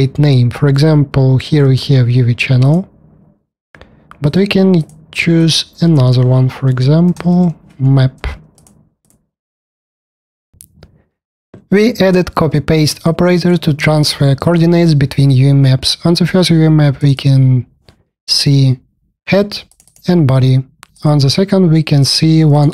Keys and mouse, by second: 16.9 click, 17.1 click, 19.6 click, 20.8 click, 21.9 click, 22.4 click.